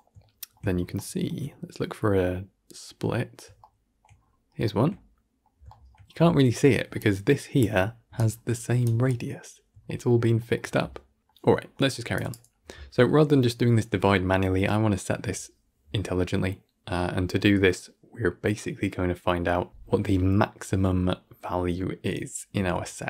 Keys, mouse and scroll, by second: 0.6 scroll down 3, 0.8-4.0 shift+middle drag, 4.0-4.5 scroll up 6, 4.5-6.0 shift+middle drag, 6.0-6.9 scroll up 1, 6.9-8.0 drag, 8.0-9.4 right drag, 9.4-9.7 scroll down 5, 9.7-12.0 shift+middle drag, 12.0-23.0 drag.